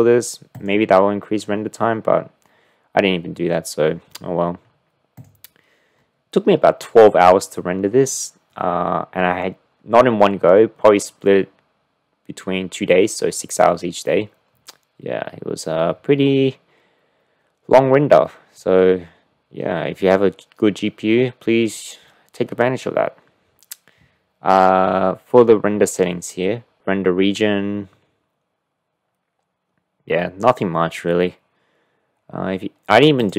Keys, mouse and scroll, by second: 5.2 drag.